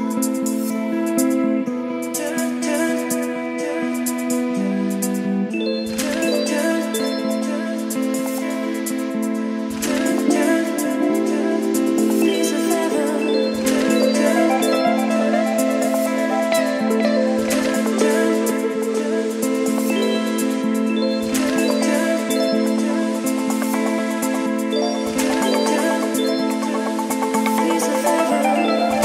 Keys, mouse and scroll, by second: 0.2 Return, 2.2-3.9 typing, 5.3-11.0 drag, 11.2-12.4 typing, 13.5-14.8 drag, 14.8-15.8 typing, 16.5-18.1 drag, 18.3 ctrl+c, 18.6 Right, 19.0 Return, 19.4 ctrl+v, 22.5-28.3 drag, 28.3-29.0 typing.